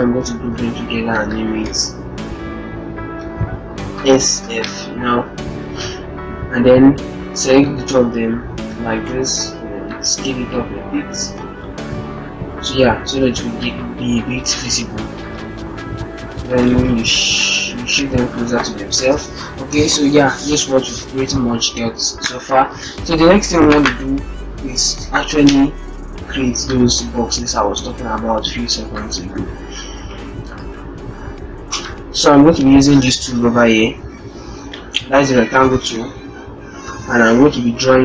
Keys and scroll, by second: 0.0 ctrl+g, 3.7 shift+s, 4.3 shift+f, 8.5 ctrl+t, 16.7 ctrl+shift+-, 16.8 ctrl+shift+0, 17.4 ctrl+shift+-.